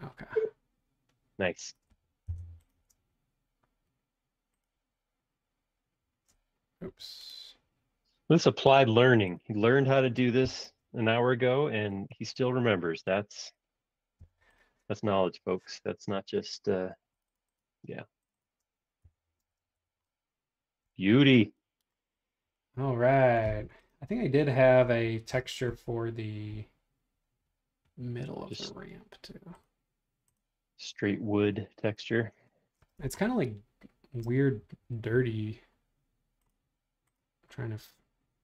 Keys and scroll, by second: 2.3 Return, 6.8 Escape, 10.5 b, 11.9 Escape, 12.2 space, 14.2 b, 15.0 space, 15.2 ⟲, 19.0 BackSpace, 33.0 super+Tab.